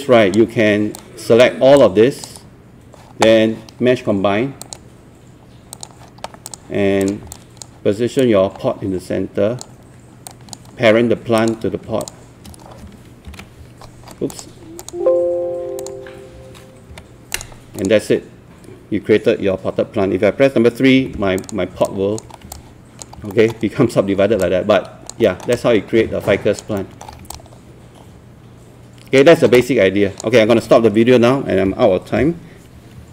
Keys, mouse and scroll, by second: 1.0 click, 1.8-3.9 alt+drag, 4.7 click, 7.3 alt+click, 9.0-10.2 drag, 12.0 shift+click, 13.3 ctrl+p, 14.3 click, 16.9 p, 17.3 click, 21.0 3, 21.4 click, 21.9 alt+click, 22.3 scroll up 1, 22.5 alt+click, 23.1 scroll up 1, 23.3 alt+middle click, 24.4 alt+click, 25.3 alt+middle click, 25.5 alt+click, 26.8 alt+middle click, 27.1 scroll down 1, 27.3-29.2 alt+drag, 29.3 alt+middle click, 29.5 alt+click.